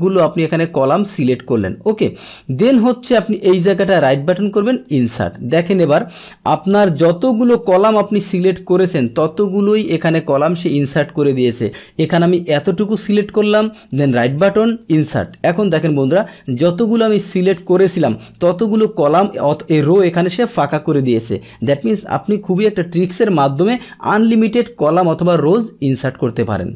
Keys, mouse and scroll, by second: 4.8 click, 7.7 ctrl+z, 8.8-9.8 drag, 11.7-12.9 drag, 13.8 right click, 14.8 click, 15.8-20.3 middle drag, 20.6 ctrl+z, 21.7 click.